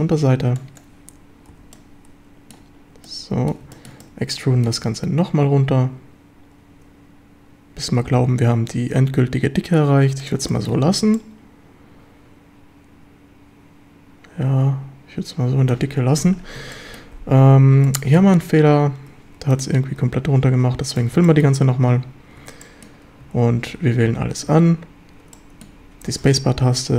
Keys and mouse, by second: 0.1 b, 1.5 z, 1.7-2.6 middle drag, 3.0-3.6 middle drag, 3.7 shift+middle drag, 4.1-4.7 middle drag, 10.2 click, 10.5 shift+drag, 11.2-15.8 middle drag, 16.7 shift+middle drag, 17.8-18.2 middle drag, 20.0 f, 21.0 f, 21.3 shift+drag, 22.4 Tab, 22.6 drag, 23.2 a, 23.7 Tab, 24.1 a, 24.5 a, 25.3 drag, 26.1 space.